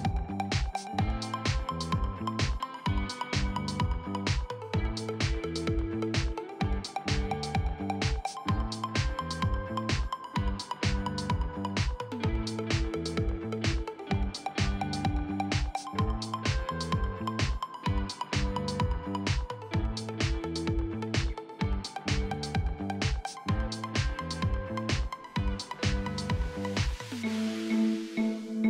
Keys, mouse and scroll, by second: 1.1 click, 1.9 click, 5.5 click, 7.4 shift+click, 8.2 e, 8.9 click, 9.7 r, 12.6 click, 13.4 r, 14.9 click, 15.8 r, 16.6-17.6 drag, 17.6 r, 18.4 click, 19.9 shift+middle click, 20.4 e, 22.0-23.8 drag, 25.0 e, 25.6-26.7 drag, 27.9 click.